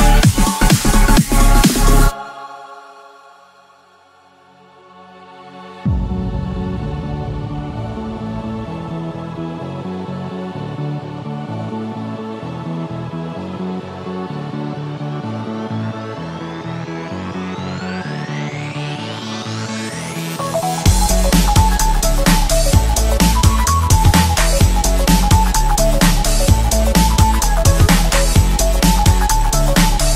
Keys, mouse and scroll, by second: 0.0-1.0 scroll down 3, 1.6 shift+click, 2.2 click, 5.1-8.1 drag, 8.5-12.2 middle drag, 16.6 KP_1, 19.4 shift+a, 20.5-21.9 drag, 21.9-22.3 scroll up 3, 22.7 s, 26.1 s, 29.7 KP_3.